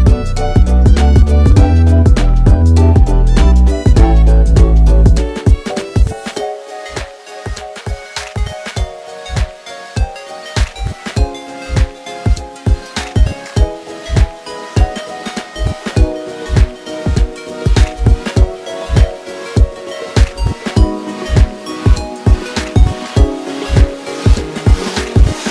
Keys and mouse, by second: 0.6 s, 4.1 ctrl+r, 5.4 s, 8.2 ctrl+r, 18.8 ctrl+r.